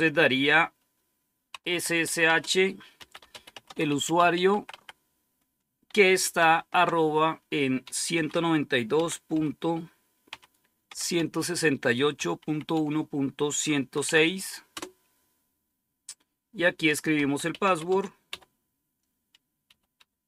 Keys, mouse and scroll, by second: 1.4-4.6 typing, 6.2 typing, 7.7-11.0 typing, 12.0-13.9 typing, 14.6 Return, 16.8-20.2 typing.